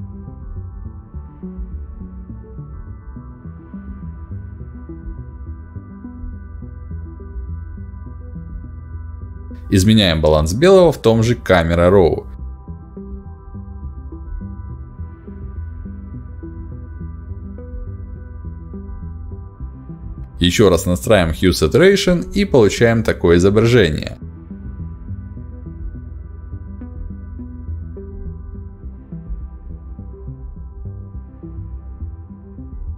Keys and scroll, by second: 8.9 ctrl+b, 19.7 ctrl+b.